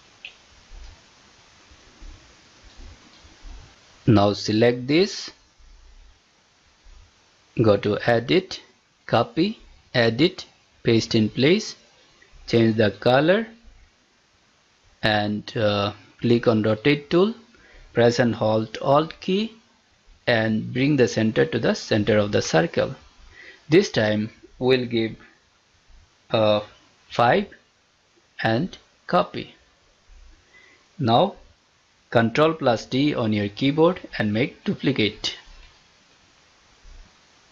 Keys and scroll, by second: 32.8 ctrl+d.